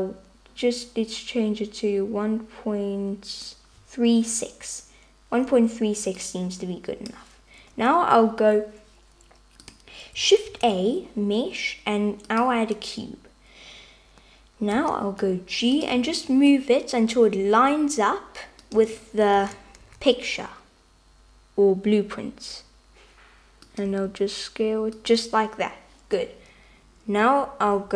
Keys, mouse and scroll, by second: 6.3 click, 10.5 shift+a, 14.8 g, 16.0 s, 18.9 h, 19.6 super+z, 19.9 g, 23.9 s.